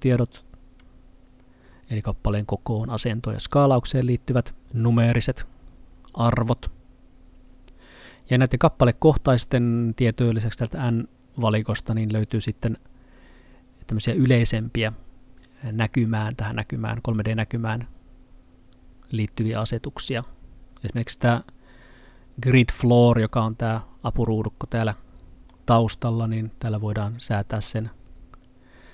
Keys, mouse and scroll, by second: 4.6 click, 12.3 click, 21.2 middle click, 27.3 click.